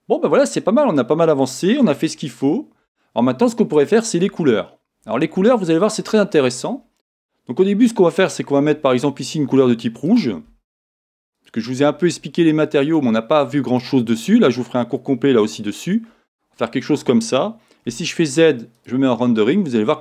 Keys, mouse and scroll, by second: 0.0-8.1 middle drag, 2.1-2.8 scroll up 1, 2.8 scroll up 1, 4.5-5.5 scroll down 1, 6.3-7.6 scroll up 1, 7.6-8.1 scroll down 1, 8.1 click, 10.0 click, 11.3-12.9 drag, 17.8 z.